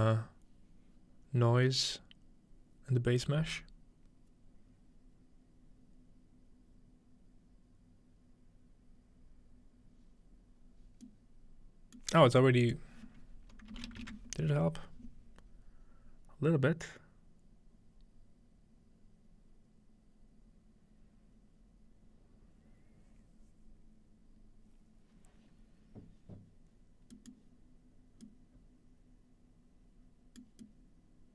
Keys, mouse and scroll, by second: 11.0 middle click, 12.6-14.7 drag, 27.4 middle click, 30.6 middle click.